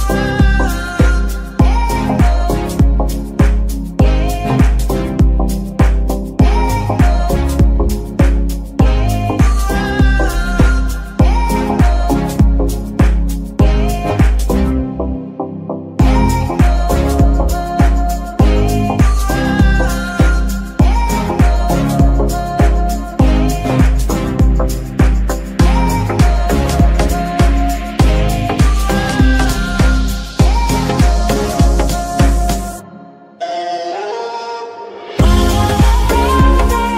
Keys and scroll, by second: 6.0 Delete, 9.7 Tab, 10.1 s, 11.0 Tab, 12.3 g, 13.1 Escape, 13.6 s, 14.9 KP_3, 17.2 g, 17.2 y, 24.8 ctrl+c, 29.5 ctrl+v, 30.5 g, 33.1 Escape.